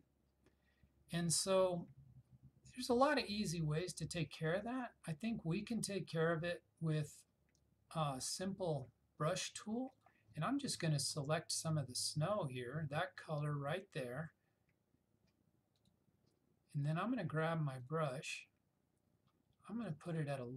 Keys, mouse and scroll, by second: 10.0 click, 15.9-20.5 drag.